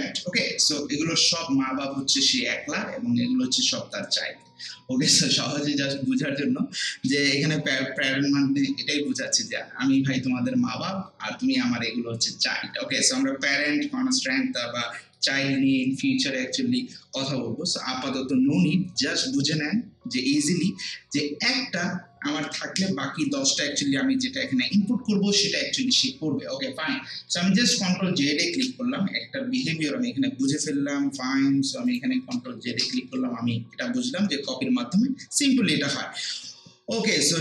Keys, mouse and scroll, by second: 28.5 ctrl+z, 31.9 click, 32.3 ctrl+z.